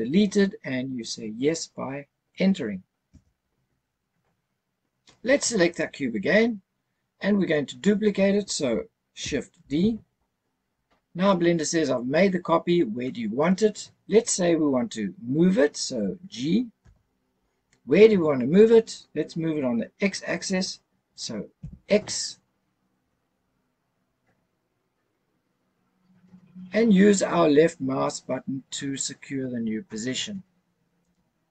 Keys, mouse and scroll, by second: 5.7 click, 9.6 shift+d, 16.8 g, 21.6 x, 31.0 click.